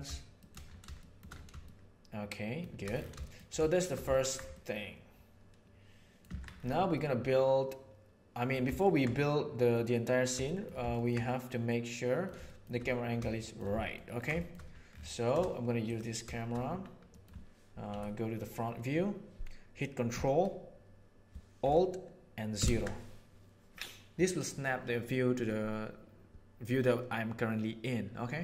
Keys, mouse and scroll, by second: 0.3 shift+middle click, 0.9 shift+middle drag, 1.6-2.5 shift+middle drag, 3.1 shift+middle drag, 3.6 shift+middle click, 4.0 ctrl+middle click, 4.4-6.0 middle drag, 6.0 click, 6.9-8.4 middle drag, 8.7 ctrl+middle click, 9.1-9.7 middle drag, 10.3 shift+middle drag, 10.9-12.2 ctrl+middle drag, 12.4 shift+middle click, 13.3 shift+middle click, 13.7 ctrl+middle click, 14.0 ctrl+middle click, 14.3 shift+middle click, 15.8 right click, 17.0 middle click, 17.8 KP_1, 22.5 ctrl+alt+KP_0.